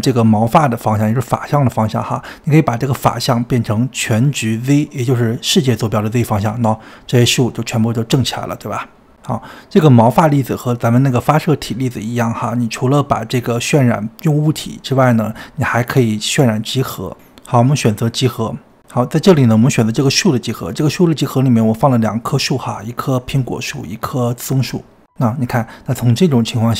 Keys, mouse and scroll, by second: 7.2-9.2 middle drag, 9.2 click, 9.7 click, 10.0 click, 10.1 click, 11.1 click, 17.7-19.8 drag, 26.4-26.7 drag.